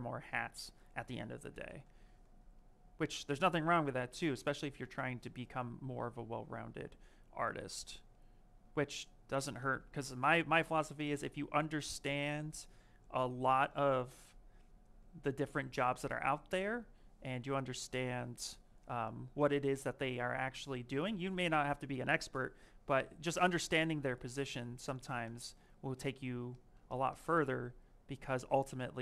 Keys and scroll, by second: 1.6 m.